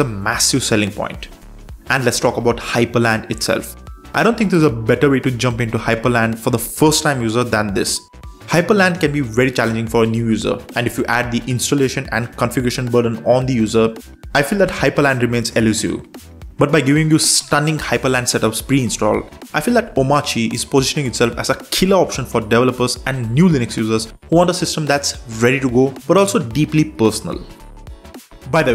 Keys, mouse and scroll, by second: 1.9 super+4, 3.1 super+space, 4.5 super+space, 5.5 ctrl+shift+super+space, 6.4 Down, 6.6 Down, 6.9 Down, 7.3 Return, 10.0 super+3, 12.4 super+4, 13.0 super+space, 14.4 super+space, 15.9 ctrl+shift+super+space, 16.7 Down, 16.9 Down, 17.0 Down, 17.4 Down, 17.7 Return, 20.5 super+3, 23.1 super+4, 24.1 super+space, 24.8 Down, 24.9 Down, 25.0 Down, 25.1 Down, 25.3 Up, 25.5 Up, 25.6 Up, 25.7 Up, 27.8 ctrl+shift+super+space.